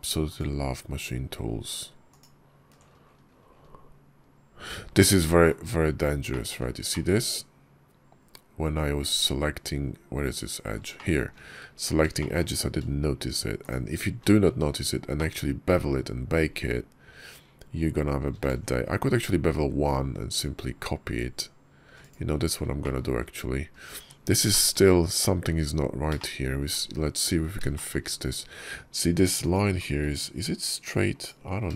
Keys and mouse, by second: 0.2 ctrl+click, 4.8 middle click, 6.2 shift+click, 6.8-10.6 middle drag, 10.8 shift+click, 12.0 shift+click, 15.0-16.2 drag, 18.3 ctrl+b, 22.7 shift+click, 23.8 Tab, 24.4 click, 25.2 `, 26.0 shift+click, 27.6 shift+click, 29.3 click.